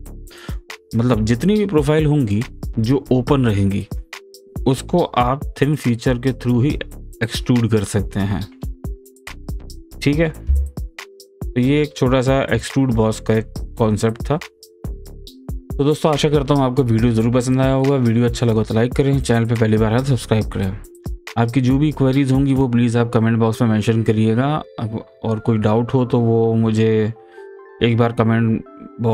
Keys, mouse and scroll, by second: 12.8-13.2 scroll down 1, 13.2 scroll up 1, 13.5-14.0 scroll down 1, 14.0-14.4 scroll up 1, 14.4-20.9 middle drag.